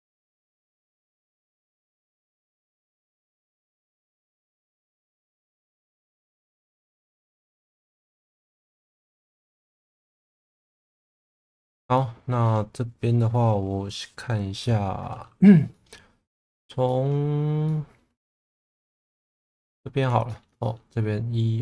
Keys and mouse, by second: 1.0 click, 3.0 shift+middle click, 6.7 click, 7.5-9.2 middle drag, 9.7-10.8 middle drag, 12.0 middle click, 14.6 middle click, 15.7 middle click, 16.9 middle click, 17.7 middle click, 18.2 2, 19.6 middle click, 20.3 shift+middle click, 20.6 middle click.